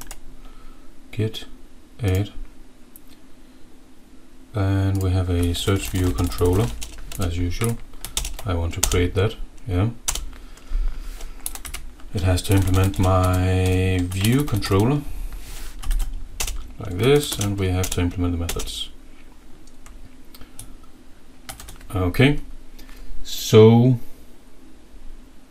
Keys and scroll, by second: 5.4-7.1 typing, 7.7 Left, 8.3 alt+Return, 8.9 Return, 10.2 Return, 11.5 End, 11.6 Left, 12.2-17.0 typing, 17.0 Left, 17.8 alt+Return, 18.7 Return, 18.9-20.1 typing, 21.5 ctrl+s.